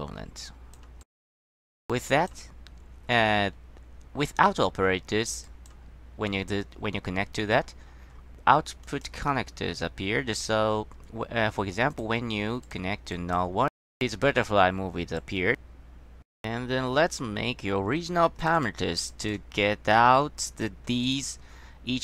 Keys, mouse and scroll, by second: 0.6 click, 1.1 click, 1.6 middle click, 2.2 click, 5.6 click, 9.0 click, 12.0 click, 12.8 click, 13.3 click, 15.3 click, 18.7 click, 19.2 click, 21.2 click.